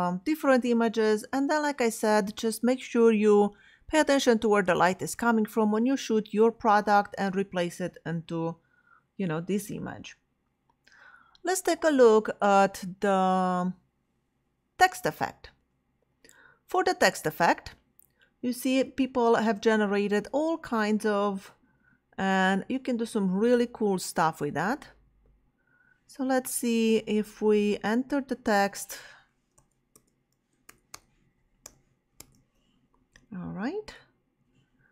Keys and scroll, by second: 29.0-32.8 typing.